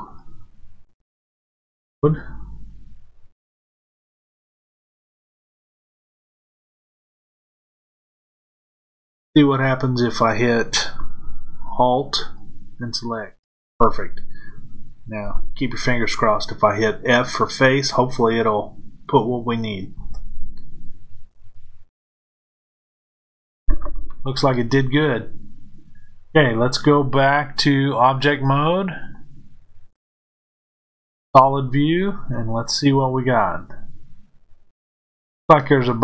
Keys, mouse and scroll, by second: 0.0-5.7 drag, 5.7-12.1 middle drag, 12.1 alt+click, 24.0-27.9 middle drag, 27.9-31.2 drag.